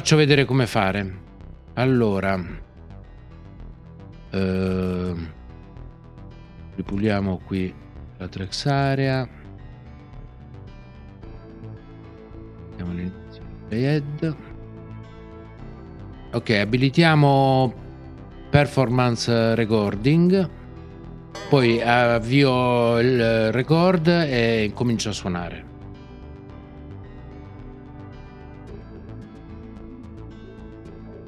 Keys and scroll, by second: 21.3 ctrl+p.